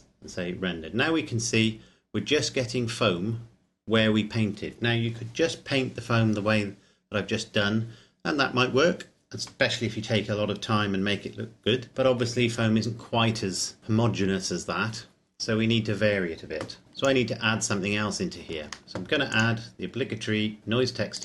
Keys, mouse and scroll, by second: 15.5-16.8 scroll down 1, 16.8 click, 18.8 shift+middle click, 19.3 click.